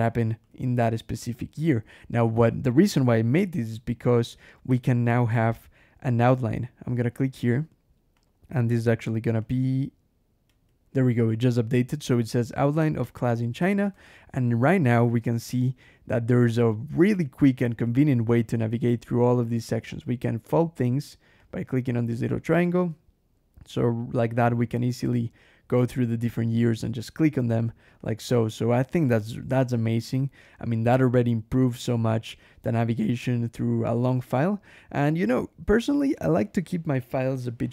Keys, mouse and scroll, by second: 0.0 k, 0.3 shift+v, 1.0 Escape, 4.5 ctrl+shift+h, 6.9 click, 8.0 click, 8.6 click, 9.3 click, 10.3 \, 13.5 click, 13.8 Escape, 14.9 scroll up 1, 15.9 scroll down 1, 16.9 scroll down 1, 17.7 click, 18.4 click, 19.0 click, 19.8 click, 21.3 click, 21.9-22.2 scroll up 1, 22.6 click, 23.7 scroll up 1, 23.9-24.3 scroll down 1, 26.7 click, 27.4 click, 27.9 click, 28.4 click, 28.9 click, 29.5 click, 30.0 click, 31.0-31.8 scroll up 2, 32.2-32.6 scroll up 1, 32.9 scroll up 1, 34.0 click, 35.2 scroll down 1.